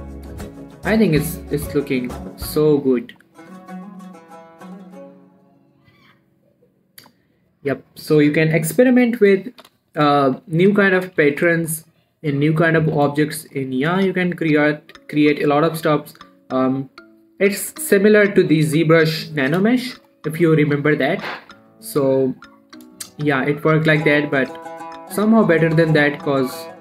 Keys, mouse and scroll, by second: 0.0-1.0 scroll up 1, 1.0 click, 2.1 h, 2.2 scroll down 1, 2.3 middle click, 2.6 scroll up 1, 2.8 middle click, 3.6 scroll up 1, 4.1 shift+middle click, 4.6 scroll down 2, 4.7 middle click, 5.0 scroll up 1, 5.8 middle click, 6.9-7.4 scroll up 1, 8.0 click, 10.0-10.6 scroll down 1, 10.6 middle click, 10.7-11.4 scroll up 3, 11.0 shift+middle click, 11.4 click, 11.6 g, 11.8 right click, 12.1 middle click, 12.4 scroll up 1, 13.0 click, 13.2 g, 13.4 right click, 13.9 click, 20.4 click, 23.0 middle click, 23.3-24.4 scroll up 4, 23.5 shift+middle click, 23.8 middle click, 24.4-26.8 drag.